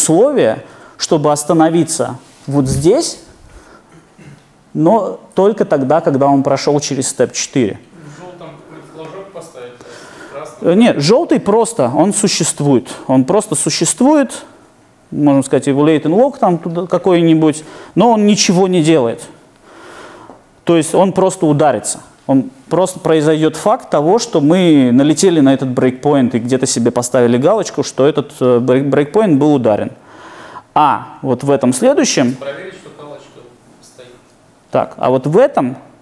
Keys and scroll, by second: 33.6 super+F8.